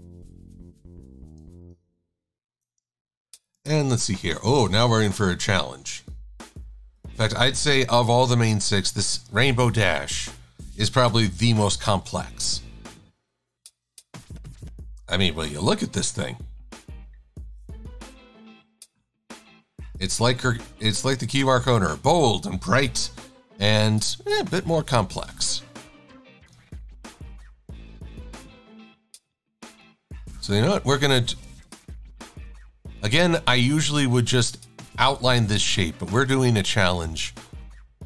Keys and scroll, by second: 23.2 super+=, 36.6 shift+x.